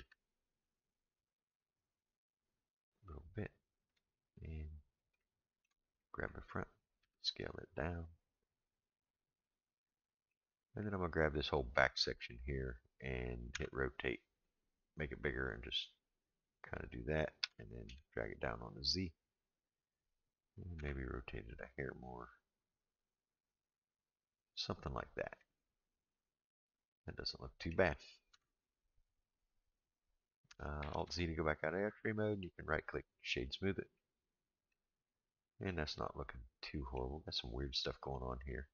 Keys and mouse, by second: 5.2 shift+middle click, 6.0 click, 7.0 s, 9.8 shift+middle click, 11.2 click, 13.5 r, 17.4 g, 20.8 r, 25.4-27.7 middle drag, 28.3 Tab, 30.9 alt+z, 32.4-33.3 right drag, 33.9-34.7 middle drag, 35.3-37.0 middle drag, 38.5-38.7 middle drag.